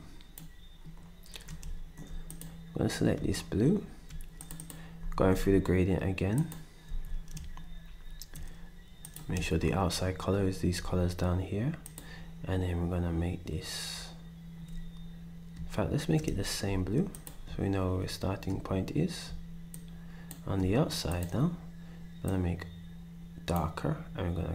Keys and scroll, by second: 5.0 ctrl+shift+d, 6.9 d.